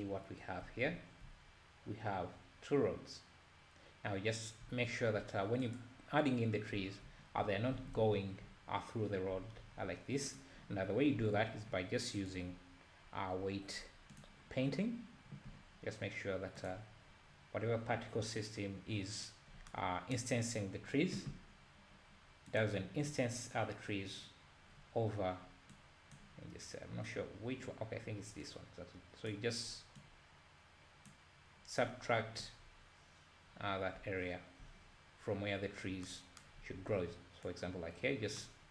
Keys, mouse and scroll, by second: 0.9-1.3 scroll up 2, 1.3 `, 5.9 click, 6.9 `, 7.3-7.8 scroll up 3, 7.9 alt+a, 10.4 click, 15.0 click, 26.1-32.7 drag, 32.7-34.0 scroll down 1, 34.0 `, 36.7-37.8 scroll up 3, 37.8-38.7 drag.